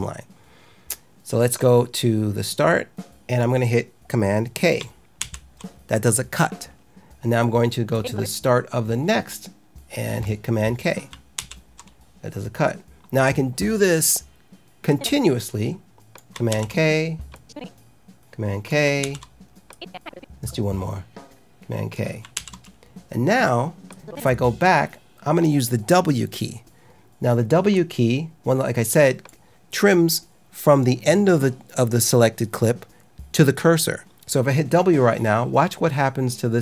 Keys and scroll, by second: 5.1 super+k, 11.3 super+k, 16.4 super+k, 19.0 super+k, 22.3 super+k.